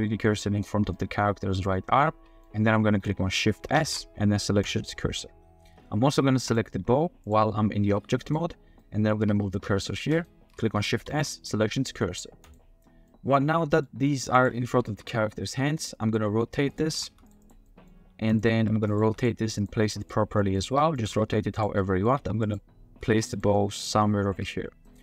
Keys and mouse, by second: 0.9-2.4 middle drag, 3.7 shift+s, 6.5 middle click, 7.8 g, 8.8-9.2 shift+middle drag, 11.0 shift+s, 13.1 click, 13.1 x, 13.3-13.8 drag, 14.4-14.9 drag, 14.9 r, 15.6-16.1 drag, 16.2-19.0 typing, 17.4 click, 17.6 drag, 18.9 click, 19.6 click, 20.4 drag, 20.7-23.1 typing, 21.8 drag, 23.5 click, 24.3 r.